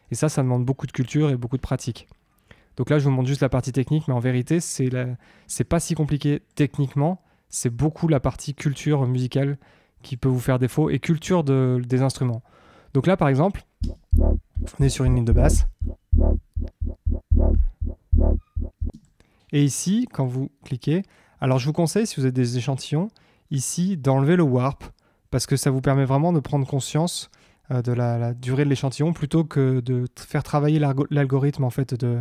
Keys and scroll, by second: 13.7 space, 18.9 space.